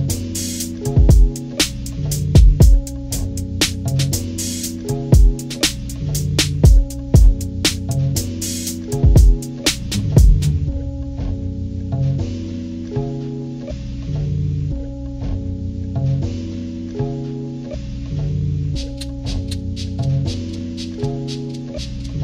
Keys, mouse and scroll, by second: 0.5 click, 0.9 ctrl+-, 1.1 ctrl+=, 1.3 scroll up 2, 1.4 click, 1.9 click, 2.5 ctrl+-, 2.9 scroll up 2, 3.4 click, 4.1 click, 4.3 click, 4.5-5.9 drag, 6.1 click, 6.4 ctrl+-, 6.8 ctrl+=, 7.2 click, 7.3 click, 7.4 click, 7.7 ctrl+=, 8.4 click, 8.6 click, 9.5 click, 10.0 ctrl+-, 10.4 ctrl+-, 10.7 click, 10.8 click, 10.9 click, 11.1 ctrl+=, 11.3 click, 11.6 click, 11.8 click, 12.0 click, 12.5 click, 12.9 click, 13.3 click, 13.8 click, 15.3 ctrl+-, 15.5 ctrl+=, 16.5 click, 17.0 click, 17.6 ctrl+=, 17.9 ctrl+=, 18.2 click, 18.4 click, 18.7 click, 19.2 click, 19.7 ctrl+=, 20.1 click, 21.4 ctrl+=, 21.8 ctrl+-.